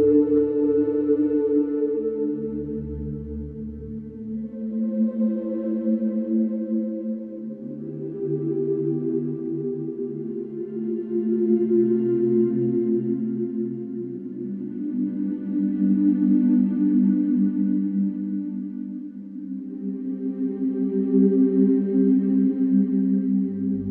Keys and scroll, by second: 2.0 Return, 2.8 4, 4.1 3, 4.4 ], 6.6 Delete, 13.9 4, 19.9 3.